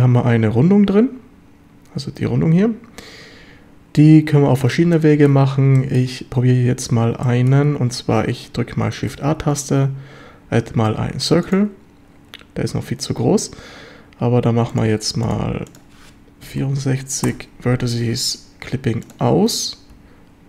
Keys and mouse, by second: 5.0 shift+middle drag, 5.8 shift+middle drag, 7.3 shift+drag, 9.1 shift+a, 14.8 click, 15.7-18.0 drag, 19.0 click.